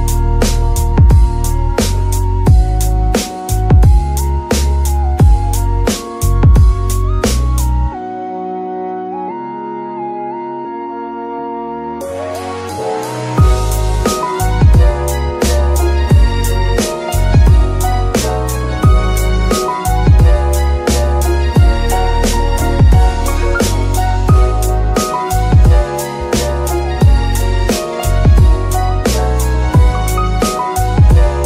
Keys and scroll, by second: 0.9 KP_3, 8.2 Tab, 8.7 shift+s, 9.6 Tab, 10.0 shift+s.